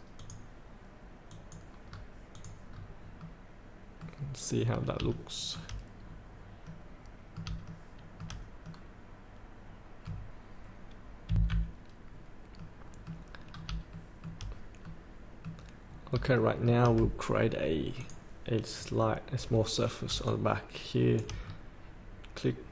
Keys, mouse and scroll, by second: 1.9 scroll up 1, 2.3 click, 2.6 scroll up 1, 3.2-4.4 middle drag, 4.5 scroll down 1, 5.1 shift+middle click, 6.6 middle click, 7.7 shift+middle click, 8.6-10.5 middle drag, 11.3 F8, 12.0 scroll up 1, 12.5 middle click, 13.4 scroll down 1, 13.9 shift+middle click, 14.9 middle click, 15.9 scroll down 1, 16.4 shift+middle click, 17.9 click, 18.7 scroll down 1, 20.2 shift+click, 21.4 scroll down 1.